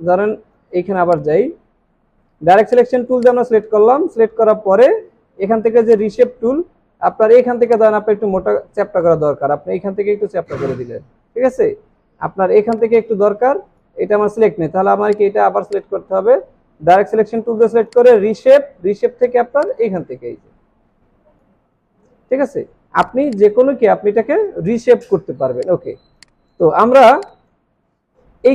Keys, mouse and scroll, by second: 0.8 alt+scroll down 2, 1.6 alt+scroll up 2, 23.3 double click, 25.1 alt+scroll down 1, 25.9 space, 26.9 alt+scroll up 1.